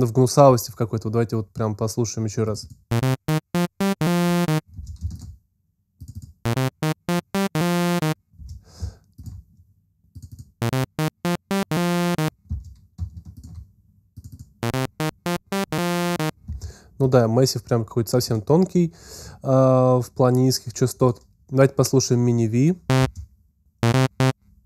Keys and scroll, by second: 4.8 alt+space, 8.6 alt+space, 12.8 alt+space, 22.8 space.